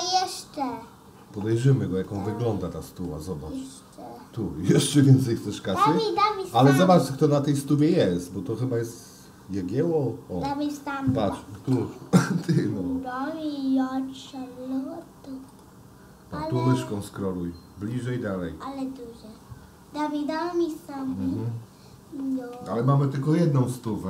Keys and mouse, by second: 0.6 click, 2.1-3.1 middle drag, 14.0 shift+d, 23.2 shift+d.